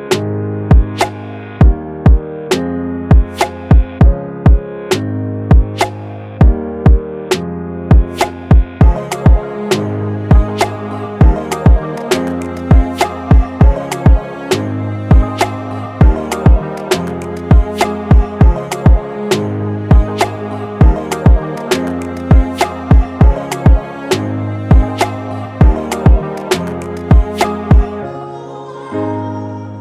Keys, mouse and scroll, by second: 8.0 typing, 26.2 double click.